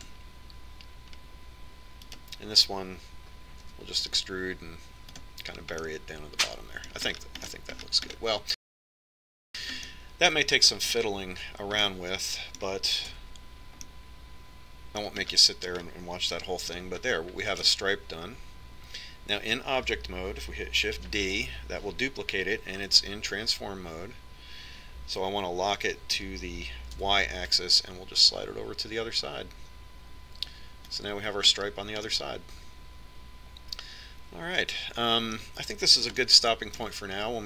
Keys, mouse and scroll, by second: 0.0 alt+s, 4.0-6.0 right drag, 5.6 e, 7.8-12.6 middle drag, 12.8-14.4 middle drag, 14.1 Tab, 14.8 middle click, 17.6-19.6 middle drag, 22.0 shift+d, 33.2-35.0 middle drag, 37.3-37.4 middle drag.